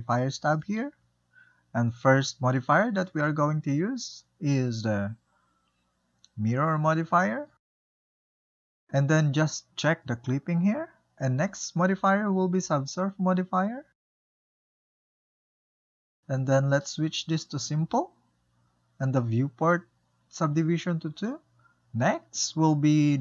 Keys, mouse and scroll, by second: 0.5-2.7 drag, 4.8-7.8 drag, 8.5-11.6 shift+middle drag, 12.0 click, 12.0 click, 14.0 click, 14.7-15.9 drag, 17.5-20.5 drag, 21.1-23.2 drag.